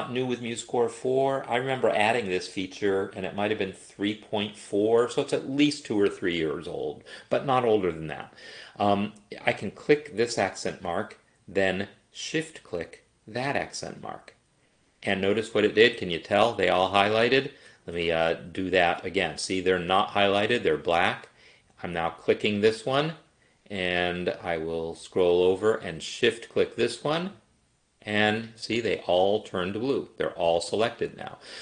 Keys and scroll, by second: 18.2 Escape.